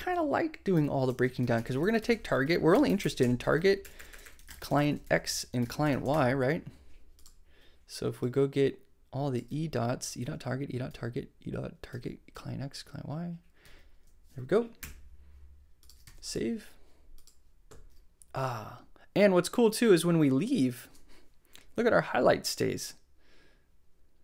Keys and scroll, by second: 0.0 shift+Left, 0.7-6.3 typing, 1.0 shift+Left, 9.4 super+d, 13.6 super+d, 14.7 super+BackSpace, 16.0 super+s.